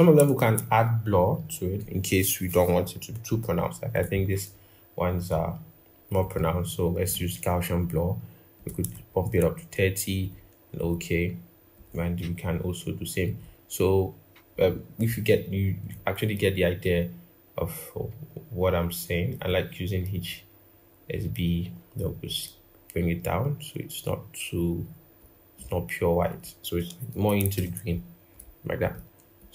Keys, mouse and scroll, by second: 0.6-1.0 scroll up 1, 1.0-1.3 scroll, 1.3-3.3 scroll up 1, 8.9 shift+Up, 9.1 shift+Up, 27.3 ctrl+-.